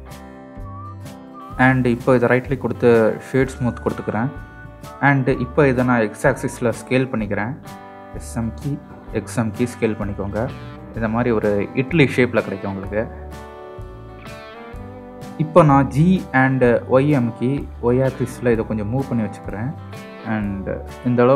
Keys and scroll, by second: 6.4 s, 7.2 x, 17.0 g, 18.3 y.